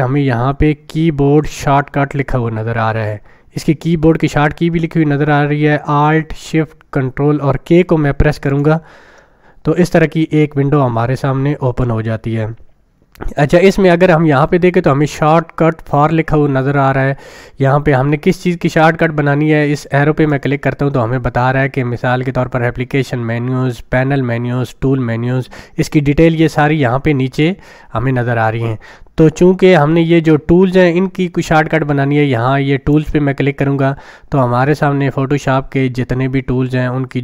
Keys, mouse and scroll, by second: 8.4 click, 20.3 click, 32.9 click.